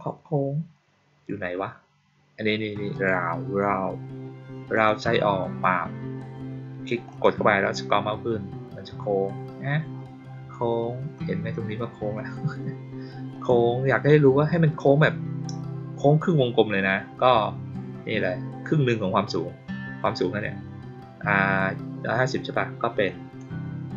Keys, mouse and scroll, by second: 2.9 click, 4.7 click, 5.4-7.0 middle drag, 7.0 click, 7.4 middle click, 7.8-10.8 middle drag, 13.2 click, 23.0 click.